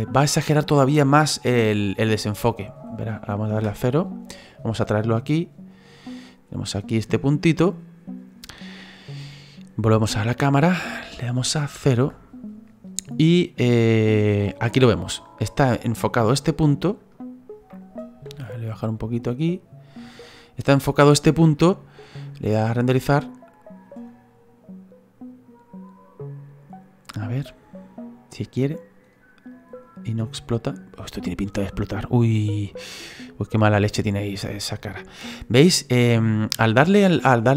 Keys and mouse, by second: 3.5 KP_0, 4.5 right click, 5.1 click, 7.1 click, 10.5 click, 11.9 KP_0, 16.4 right click, 19.4 click, 22.9 click, 23.3 click.